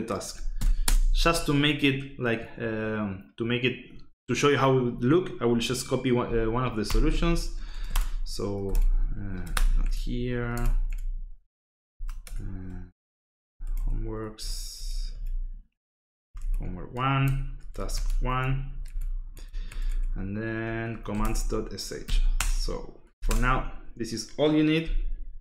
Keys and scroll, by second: 0.6 c, 0.8 space, 6.6-10.3 typing, 8.7 Tab, 9.4 Escape, 9.8 Tab, 10.5 Tab, 10.9 Tab, 11.6-14.1 typing, 14.3 Tab, 14.7 Tab, 15.1 Tab, 15.8-18.7 typing, 17.1 Tab, 18.8 Tab, 19.3 Tab, 19.7 Tab, 19.9 Tab, 21.0 c, 21.2 Tab, 22.0 ., 22.3 Return, 23.0 l, 23.2 Return.